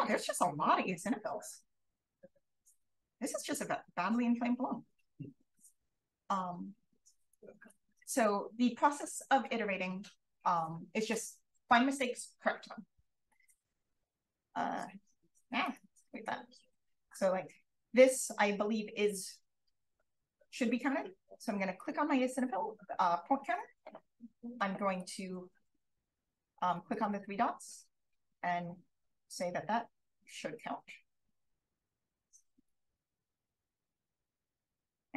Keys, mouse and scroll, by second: 0.0-2.6 typing, 3.6 d, 13.2 d, 13.8 click, 14.2 d, 14.8 click, 16.0 click, 16.6 d, 17.3 d, 19.9 d, 20.4 d, 21.8-22.9 drag, 24.9 click, 27.0 click, 27.6 d, 28.2 d, 29.4 d, 30.1 d, 30.5 d, 31.3 d, 32.9 d, 33.0-33.5 scroll up 1, 33.4 d, 34.0 d.